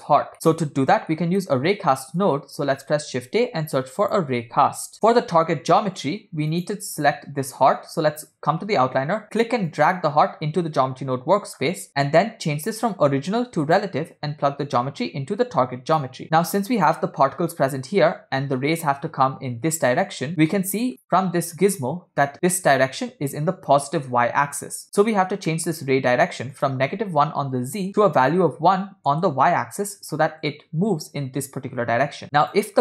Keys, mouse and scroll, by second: 0.3 middle click, 1.1 scroll down 2, 1.4 middle click, 2.3 click, 3.5 shift+a, 6.1 click, 9.7 click, 10.0 click, 11.9 middle click, 13.7 click, 14.8 drag, 14.9-16.1 drag, 16.2-16.6 middle drag, 20.5 middle click, 24.9 scroll up 3, 25.5 middle click, 26.6-27.9 drag, 28.2-29.2 drag, 32.2 click, 32.2 middle click, 32.2 scroll down 2.